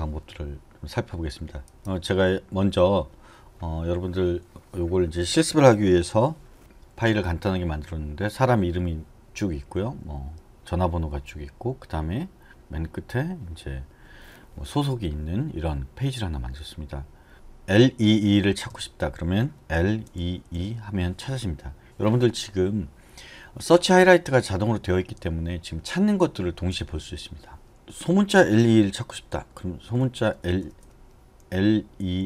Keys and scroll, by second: 18.7 /, 19.7-20.2 typing, 28.4-32.0 typing.